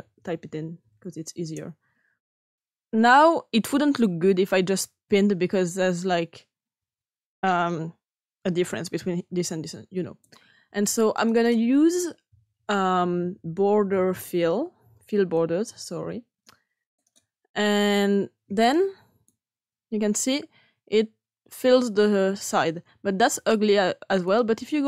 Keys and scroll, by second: 0.0-2.3 typing, 13.1-14.3 typing.